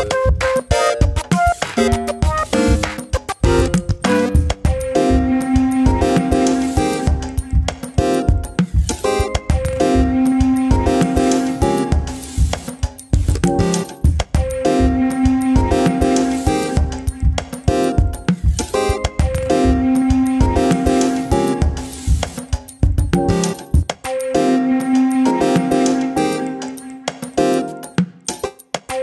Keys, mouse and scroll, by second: 0.3 ctrl+z, 0.6 ctrl+r, 2.8 3, 2.8 click, 3.1 e, 4.0 shift+middle click, 4.1-4.5 scroll up 1, 4.5 2, 5.0 click, 5.8 x, 6.9 middle click, 7.5-7.8 scroll up 2, 7.8 shift+middle click, 8.1-8.8 scroll up 3, 8.8-9.9 middle drag, 9.9-10.6 scroll down 6, 10.6 Tab, 10.8 middle click, 11.3-11.7 scroll down 1, 11.7-12.2 middle drag, 12.2-13.1 scroll down 2, 13.1-14.5 drag, 14.5 `, 16.0-16.7 drag, 16.7-17.3 scroll up 1, 17.3 g, 21.3 g, 22.3-23.4 middle drag, 23.4 click, 24.3 scroll down 2, 24.5 middle click, 24.9 r, 27.3 scroll down 2, 27.5 middle click, 27.7-28.0 scroll up 4, 28.0 click.